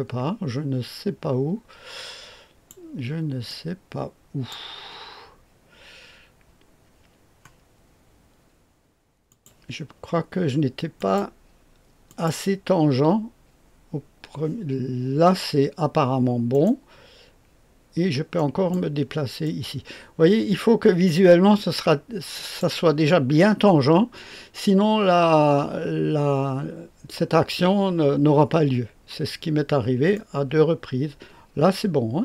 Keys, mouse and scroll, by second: 3.4-4.5 drag, 9.2 click, 10.9 click, 12.0 click, 16.5 right click, 18.3 click, 19.4-22.6 drag, 30.1-32.2 drag.